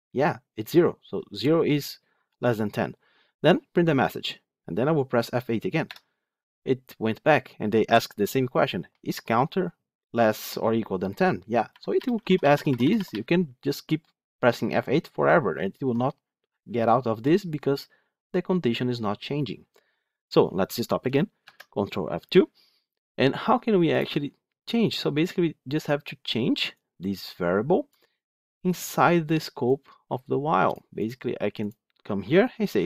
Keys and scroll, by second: 5.8 F8, 9.9 F8, 11.6 F8, 21.3 ctrl+F2, 23.9 ctrl+F2.